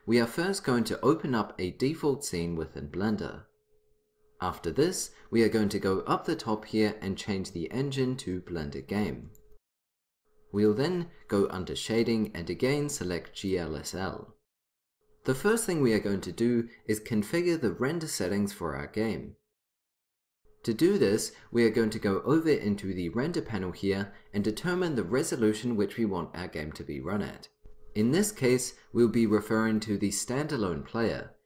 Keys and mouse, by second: 6.8-8.7 drag, 13.4-14.8 drag.